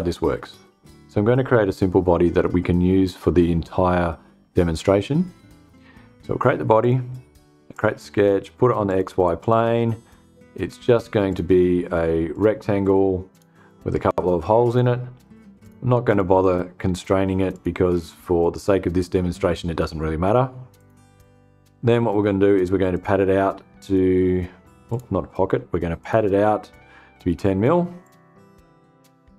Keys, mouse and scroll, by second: 6.3 click, 7.2 click, 8.4 click, 8.9 click, 11.8 click, 12.8 click, 14.1 click, 15.0 click, 15.5 click, 16.4 click, 16.9 click, 20.2 click, 22.4 click, 24.3 click, 25.4 click, 27.5 click, 29.0 click.